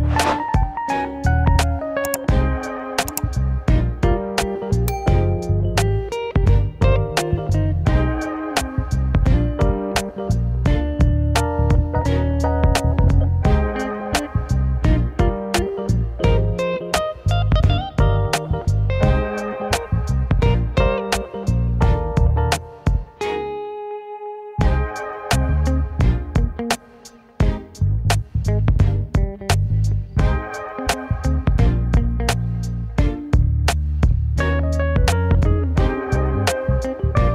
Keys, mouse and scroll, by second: 0.2 e, 0.9 s, 3.4 KP_1, 4.9 ctrl+r, 6.5 s, 7.5 scroll down 1, 8.3 shift+z, 8.8 shift+z, 9.6 click, 11.0-13.6 middle drag, 13.6 click, 14.0-14.4 scroll up 2, 16.9-19.1 drag, 19.1 KP_1, 20.3-21.6 middle drag, 21.6 KP_1, 22.1 scroll down 2, 22.4-24.5 middle drag, 24.5 scroll up 1, 24.8-25.3 scroll down 3, 25.3 KP_1, 26.8 Tab, 27.1-28.2 middle drag, 28.2 KP_1, 29.1-30.3 middle drag, 30.3 KP_7, 31.5 r, 33.4 KP_1, 34.1 shift+z, 34.5 scroll up 2, 37.2 scroll down 2.